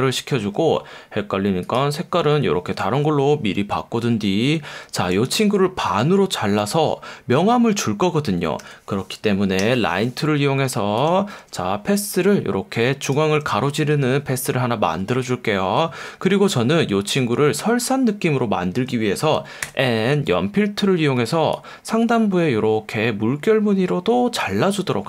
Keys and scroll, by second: 0.4 F1, 5.3 F1, 8.6 F1, 9.6 \, 13.8 F1, 18.8 F1, 19.6 n.